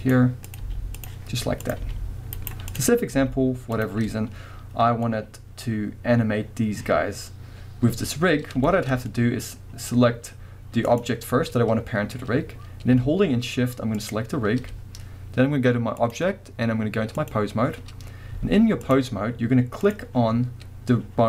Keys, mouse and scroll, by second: 0.5 click, 0.6 g, 1.2-1.6 scroll down 1, 1.6 click, 1.8 g, 2.5 right click, 2.7 click, 3.1 g, 3.8 click, 4.1-10.9 middle drag, 9.5-10.5 scroll up 2, 10.5-10.9 scroll up 1, 10.9 click, 11.3-14.0 scroll down 1, 14.0 shift+click, 16.0-19.9 drag, 18.3 z, 20.5 scroll up 1.